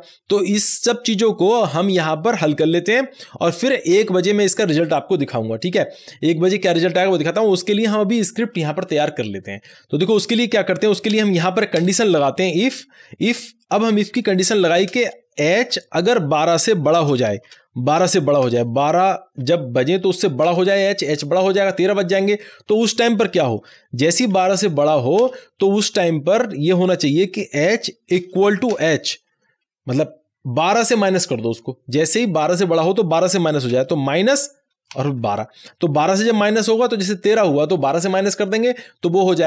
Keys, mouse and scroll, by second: 9.7 ctrl+z, 10.1 click, 11.0 Return, 12.2-13.0 typing, 14.2 shift+9, 14.8 space, 15.6 h, 16.9-20.4 typing, 22.4 Right, 24.3 shift+[, 25.1 Return, 27.5 Return, 27.5 h, 28.1 space, 28.4 =, 28.6 space, 29.9 h, 33.6-35.8 typing.